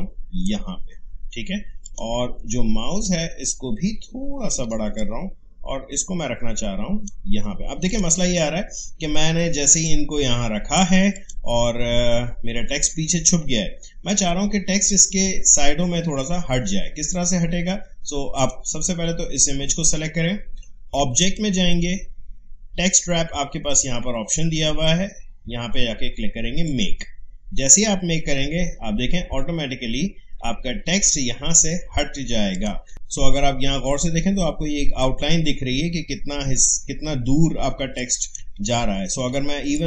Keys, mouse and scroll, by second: 18.3 click, 21.2 click, 26.6 click, 32.5 click, 37.7 space, 37.9 click, 38.3 space, 38.7 alt+scroll down 1, 39.7-39.8 drag.